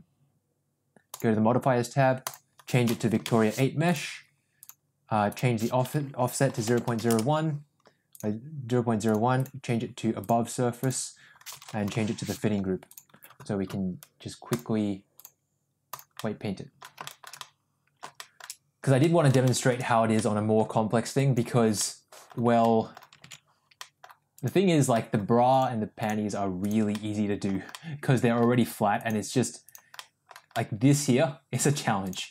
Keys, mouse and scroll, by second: 2.1-4.8 drag, 5.2-7.5 drag, 8.0-9.0 drag, 9.3-10.4 drag, 10.7-13.0 drag, 15.0 click, 16.2 middle click, 17.0 shift+middle click, 17.3-18.3 middle drag, 18.9 middle click, 19.4 shift+middle click, 20.1 middle click, 21.1 click, 21.7 middle click, 22.5 middle click, 23.5 ctrl+z, 23.7 middle click, 24.3 click, 24.8 middle click, 25.4 click, 25.9 click, 26.5 click, 26.9 middle click, 27.7 middle click, 28.9 click, 29.5 click, 29.9 middle click, 30.5-31.5 middle drag, 31.9 click.